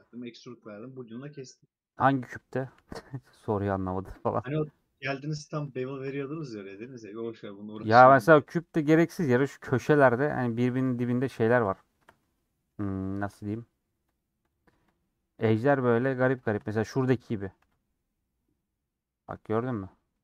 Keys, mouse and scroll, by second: 3.1 alt+click, 3.3 middle click, 4.1-6.0 alt+shift+drag, 6.0 middle click, 7.0 alt+shift+click, 8.9 shift+click, 11.0 alt+shift+click, 11.7 alt+shift+click, 12.2 middle click, 12.8-14.1 scroll up 1, 14.4-15.7 alt+shift+drag, 16.0-17.6 shift+drag, 17.6 ctrl+b.